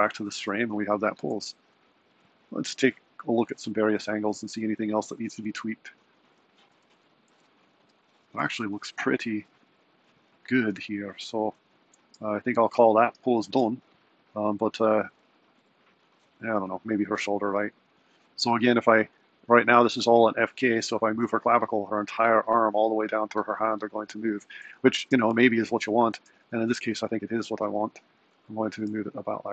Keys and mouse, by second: 6.8 z, 17.7 click, 21.4 r, 25.0 z, 26.4 r, 28.8 r.